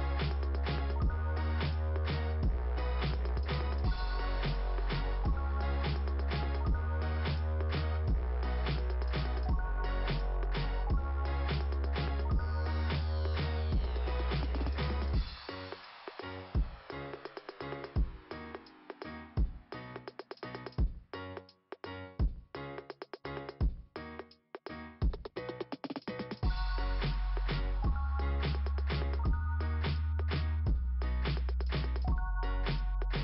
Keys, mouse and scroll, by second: 0.5 ,, 4.1 click, 4.2 click, 4.5 click, 6.2 click, 6.9 right click, 10.6 click, 12.2 right click, 14.0 click, 14.2 click, 17.4 click, 17.7 click, 18.8 right click, 19.6 click, 19.9 click, 23.3 click, 24.0-25.1 scroll down 2, 25.8 scroll down 1, 26.6 scroll down 1, 27.6 scroll down 1, 31.2-32.6 scroll down 1, 32.8 click.